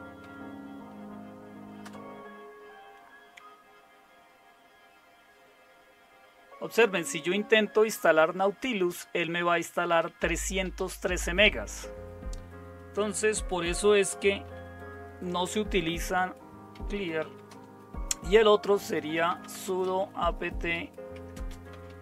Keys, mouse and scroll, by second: 0.0-0.7 typing, 1.8 typing, 14.4 n, 15.4 Return, 16.5-22.0 typing.